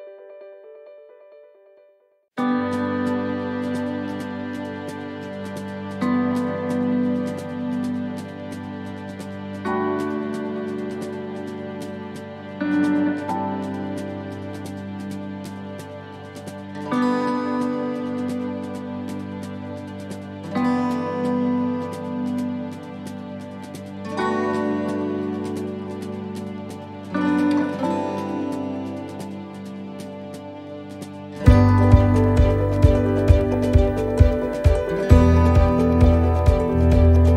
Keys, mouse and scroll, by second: 0.3 click, 3.8 shift+middle click, 6.8 middle click, 7.8 shift+middle click, 8.8 right click, 9.4 shift+right click, 10.5 click, 12.4 ctrl+r, 15.9 right click, 16.3 shift+right click, 18.5 click, 19.8 shift+middle click, 22.2 right click, 22.7 alt+shift+right click, 23.7 middle click, 24.7 shift+middle click, 26.2 alt+shift+right click, 27.3 s, 36.8 click.